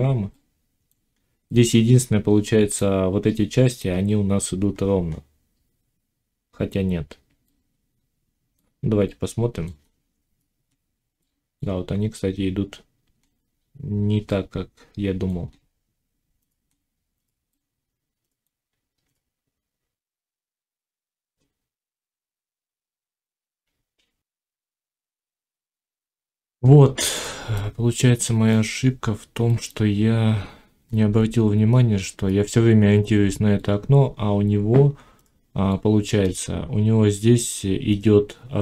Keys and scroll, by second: 24.3 F9.